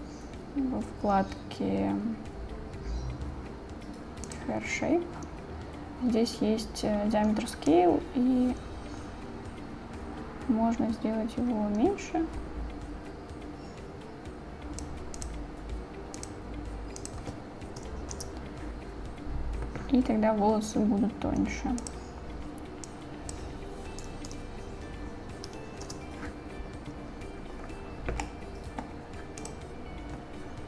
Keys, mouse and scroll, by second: 15.8-18.8 drag, 21.8-26.3 drag, 24.5 BackSpace, 28.3 middle click, 29.7 click.